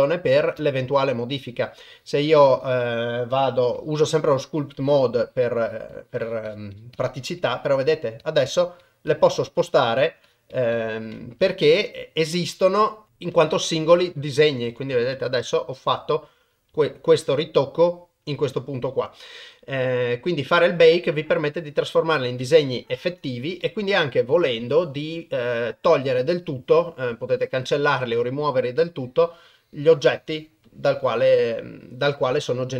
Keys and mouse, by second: 0.8 ctrl+Tab, 3.7 f, 5.3 click, 5.6 click, 5.9 click, 6.2 click, 6.5 click, 6.7 click, 7.0 click, 7.2 click, 7.4 click, 7.7 click, 7.9 click, 8.2 click, 8.5 click, 8.8 click, 9.1 click, 9.4 click, 9.6 click, 10.0 click, 10.3 click, 10.5 click, 10.8 click, 11.5-12.7 Left, 12.8 click, 13.3 Left, 13.5 Left, 13.8 Right, 14.0 Right, 14.2 Right, 14.5 Right, 14.7 Right, 14.9 Left, 15.1 Left, 15.6 Left, 16.4 Right, 16.7 Left, 18.3 Right, 19.0-20.3 Right, 21.8 click, 22.9 ctrl+Tab, 28.8-32.7 drag.